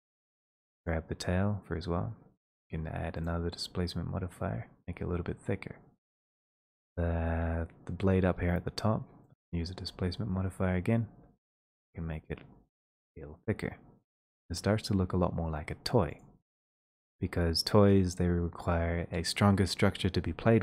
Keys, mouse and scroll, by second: 0.0 click, 0.5 shift+middle click, 0.5 click, 4.6 scroll down 2, 6.2 click, 6.7-7.1 scroll, 9.3 click, 10.4 scroll, 11.2-11.9 scroll, 15.1 middle click, 15.1 click.